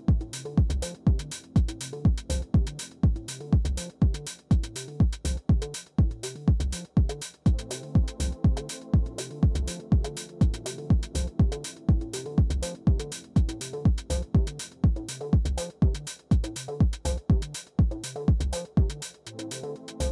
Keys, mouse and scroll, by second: 0.0-6.4 typing, 7.4 Return, 9.2 typing, 10.0 Return, 14.5 click, 14.7 click, 15.1-16.2 Down, 15.8 Down, 16.5 click, 16.7-19.5 typing, 19.4 Return.